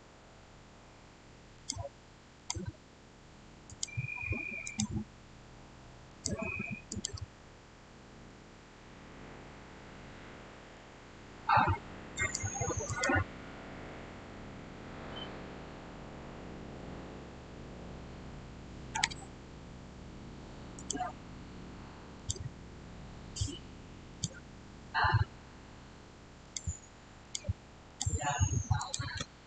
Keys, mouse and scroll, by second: 1.4 click, 8.9 shift+scroll down 1, 9.0-12.0 shift+middle drag, 12.0 click, 20.6 click, 26.3 click, 26.3 click.